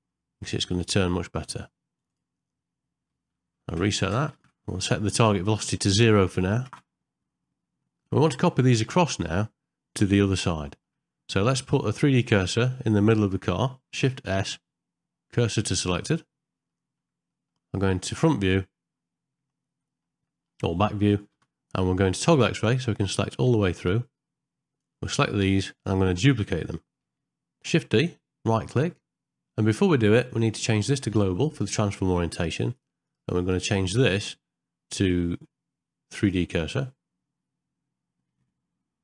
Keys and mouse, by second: 3.6 shift+Left, 4.1 space, 4.4 shift+Left, 5.9 click, 7.9 ctrl+middle click, 8.3 shift+middle click, 9.0 middle click, 10.5 shift+middle click, 12.1 click, 14.3 shift+s, 16.7 middle click, 17.3 middle click, 18.4 KP_3, 19.9 middle click, 20.3 shift+middle click, 21.3 z, 23.7-24.8 drag, 27.7 shift+d, 30.4-32.8 drag, 33.1-36.3 drag.